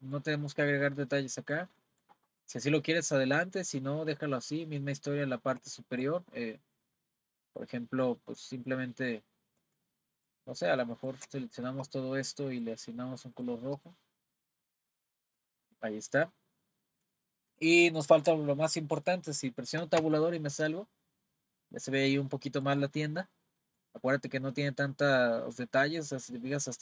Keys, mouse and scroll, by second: 5.3-5.7 scroll up 2, 5.7 shift+middle click, 6.6-7.0 scroll up 1, 7.0-7.5 scroll down 3, 7.5-8.6 middle drag, 8.6 click, 9.9 shift+middle click, 11.0 shift+click, 12.5 click, 13.3 click, 14.3-15.4 middle drag, 15.4 click, 15.7-18.7 middle drag, 20.0 Tab, 20.6-22.9 middle drag, 22.9-23.3 scroll up 2, 23.6-26.3 middle drag, 26.3-26.8 scroll up 4.